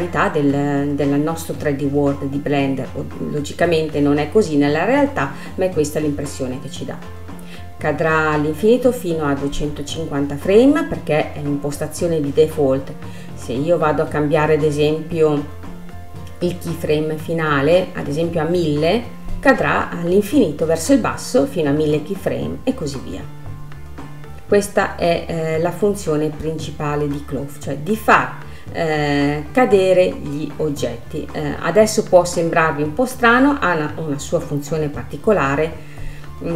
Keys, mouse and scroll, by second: 1.0-1.8 scroll up 12, 2.5 scroll up 1, 2.6-3.3 scroll down 10, 4.2-5.2 drag, 5.2 space, 10.9 scroll down 2, 14.8-16.0 scroll down 8, 16.0 space, 18.7-19.9 drag, 19.9 KP_0, 23.2-26.2 drag, 26.7 click, 27.2-29.0 scroll up 9, 29.0 click, 29.8-30.1 scroll up 2, 31.0 click, 31.9 scroll up 3, 33.7 click, 34.5-34.9 scroll up 3, 35.6-36.5 middle drag.